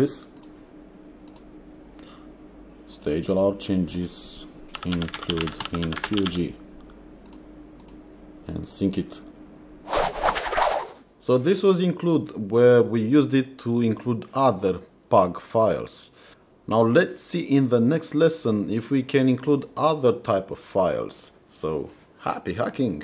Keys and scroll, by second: 4.6-6.8 typing.